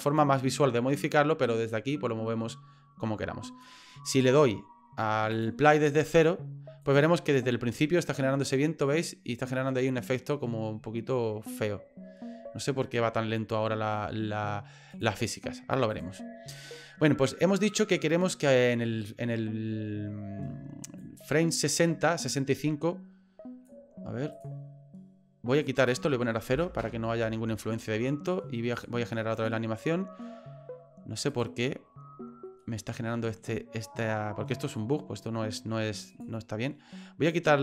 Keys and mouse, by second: 1.7-3.7 drag, 5.3 click, 6.8 click, 14.9 click, 15.9 click, 21.0-23.7 drag, 25.9-27.4 drag, 28.7 click, 29.4 click, 31.3 click, 32.6 middle click, 34.8 middle click, 36.1 click.